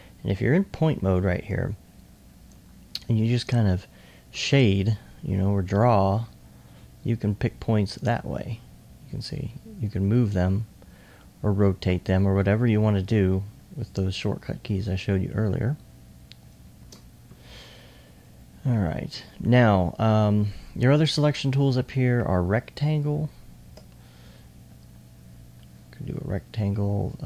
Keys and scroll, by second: 12.0 r.